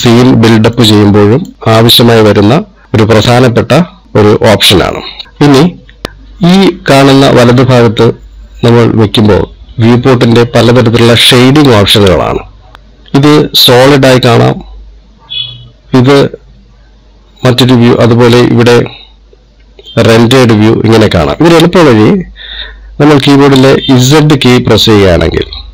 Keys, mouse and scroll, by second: 6.0 middle click, 6.0-6.7 scroll up 1, 24.5 z.